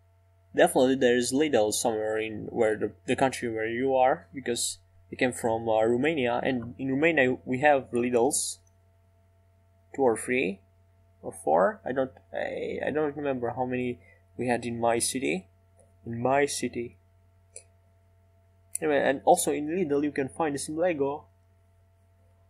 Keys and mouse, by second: 16.9-19.4 drag.